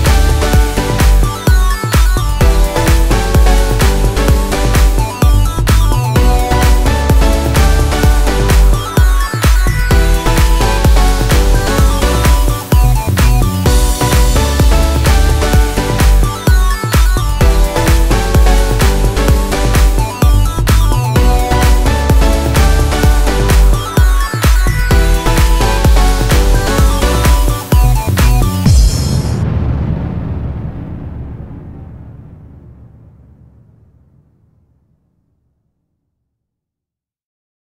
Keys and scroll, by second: 0.5 ctrl+space, 4.4 F3, 4.6 Escape, 9.6 space, 10.7 ctrl+g, 11.4 e, 13.3 Escape, 16.2 shift+Page_Down, 17.1 Escape, 23.3 ctrl+u, 23.5 Escape, 30.8 space, 34.8 shift+F2, 35.9 F9.